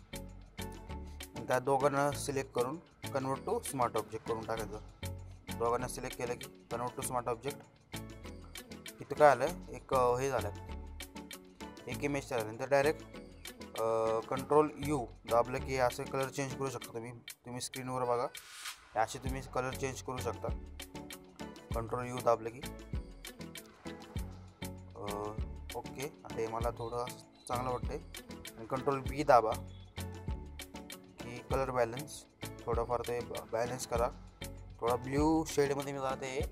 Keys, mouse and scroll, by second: 1.1 ctrl+click, 2.2 right click, 4.2 click, 8.1 click, 10.0 ctrl+u, 13.0-16.7 drag, 26.6 ctrl+b, 29.4-33.2 drag.